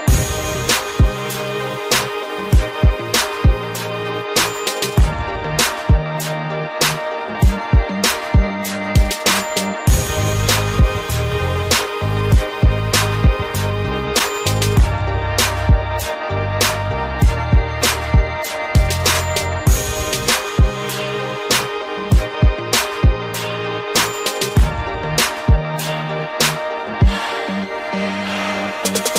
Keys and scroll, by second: 26.8 Delete.